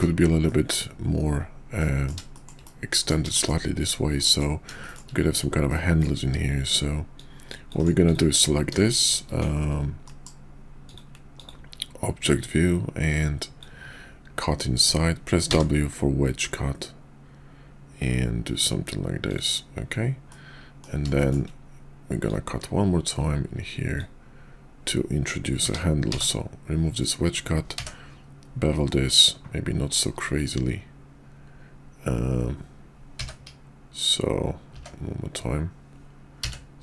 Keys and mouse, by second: 0.5 middle click, 1.8 middle click, 2.3 shift+middle click, 2.7-3.1 middle drag, 3.4 shift+middle drag, 4.3 middle click, 4.8 shift+middle click, 5.7-6.0 middle drag, 7.1-7.9 drag, 8.1 click, 10.1 shift+v, 12.4-19.4 drag, 20.3-20.8 middle drag, 21.2 shift+middle click, 22.2-33.3 drag.